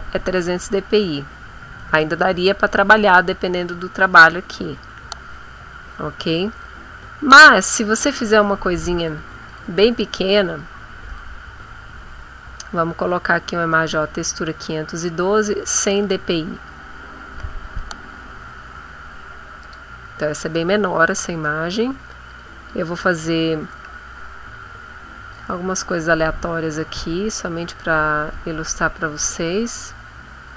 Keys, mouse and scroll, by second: 0.3-1.3 scroll down 4, 1.3-1.9 scroll up 4, 2.9 scroll down 2, 4.1 click, 5.5-6.3 scroll up 2, 6.5-7.3 scroll down 3, 8.9 click, 9.5 click, 11.1 click, 13.9 click, 15.9 click, 19.6 click, 20.3 ctrl+middle click, 22.2 click, 23.7 click, 24.9-26.1 drag, 26.8 ctrl+z, 27.3 ctrl+click, 28.3 click, 28.7 click, 29.8 click.